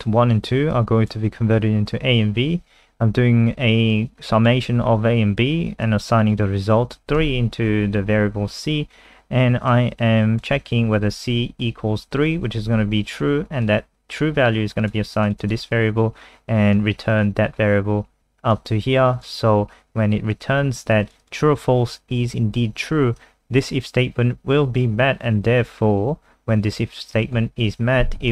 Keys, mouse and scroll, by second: 15.4 click, 16.7 click, 21.2 click, 23.2 click.